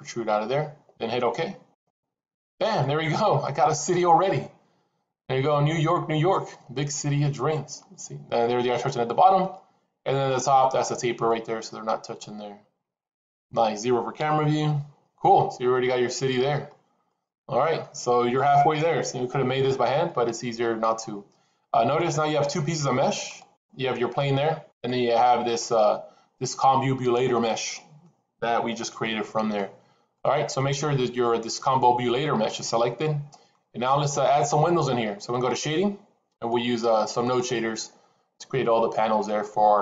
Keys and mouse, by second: 2.7-3.3 middle drag, 3.9-7.7 middle drag, 9.0 middle click, 11.1-13.2 middle drag, 14.0 KP_0, 15.9-16.5 middle drag, 16.9-17.7 middle drag, 21.9-22.7 middle drag, 23.3 click, 24.6 click, 27.7 middle click, 28.9 middle click, 30.0 middle click, 32.5 middle click.